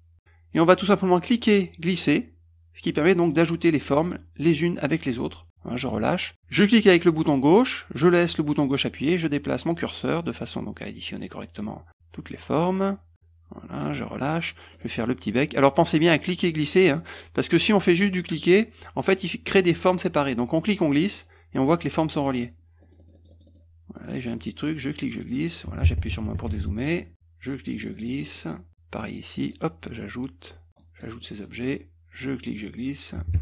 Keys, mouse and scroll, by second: 1.3-5.9 drag, 6.7-13.9 drag, 14.5 middle click, 14.9 middle click, 16.3-17.0 drag, 18.0 click, 18.4 click, 20.6-21.3 drag, 22.2-24.1 scroll up 8, 24.2 middle click, 24.9 click, 27.1-27.8 drag, 28.0 middle click, 28.4 middle click, 29.0 click, 30.0 click, 30.8 middle click, 31.3 middle click, 31.9 click.